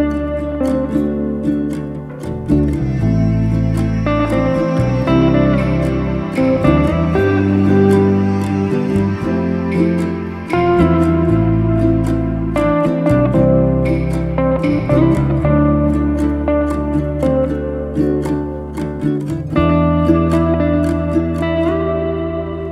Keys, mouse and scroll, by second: 0.0-1.4 middle drag, 1.7 shift+click, 2.5 click, 3.2 g, 4.2-5.5 middle drag, 5.5 g, 6.8 r, 7.8 z, 8.0-9.4 middle drag, 10.1 scroll up 2, 10.4-11.6 middle drag, 11.6 r, 15.4 z, 15.5-17.0 middle drag, 17.2-17.5 middle drag, 17.5 scroll down 2, 17.7-18.1 middle drag, 18.1 scroll down 1, 18.3 middle drag, 18.6-19.4 scroll up 4, 19.4 r, 20.3 z, 20.5 scroll down 1, 20.7-21.8 middle drag, 21.8-22.7 scroll up 2.